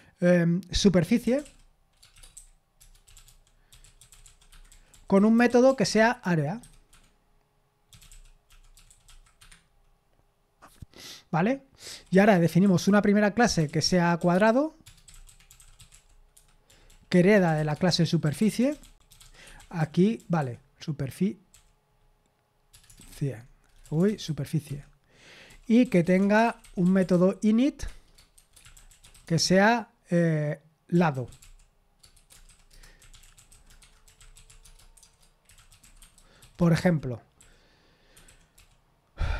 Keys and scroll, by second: 4.5 Escape, 4.5-7.4 typing, 17.6-20.6 typing, 28.5-29.4 typing, 34.7-37.9 typing.